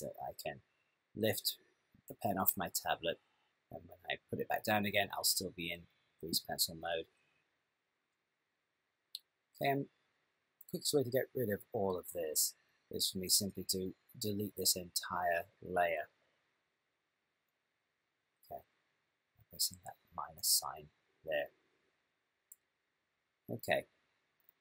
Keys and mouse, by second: 18.3 click.